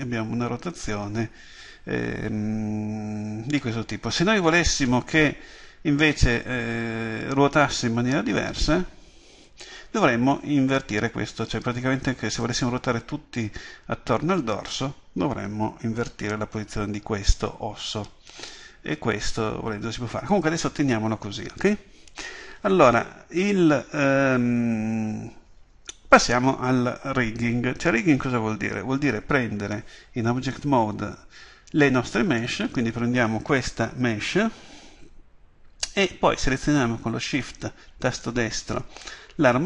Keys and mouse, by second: 32.4 right click, 38.1 right click.